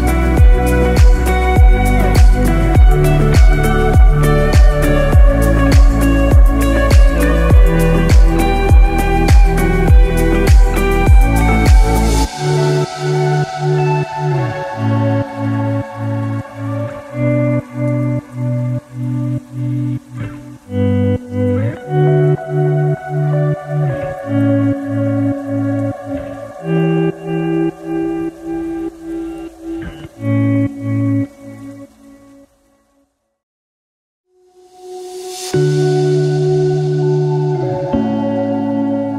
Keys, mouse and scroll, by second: 0.4 ctrl+b, 8.7-9.1 scroll down 3, 8.9 middle click, 12.0 scroll up 1, 12.3 Tab, 12.8 middle click, 16.6 click, 20.9 middle click, 22.4-22.8 scroll up 1, 24.7 click, 26.2 middle click, 27.0-27.5 scroll up 1, 28.1 click, 28.7-30.5 click, 34.6 middle click, 35.4 scroll down 4, 35.9 middle click, 36.4 scroll down 1, 36.8 middle click, 37.2-37.7 scroll up 5, 38.6 scroll down 1.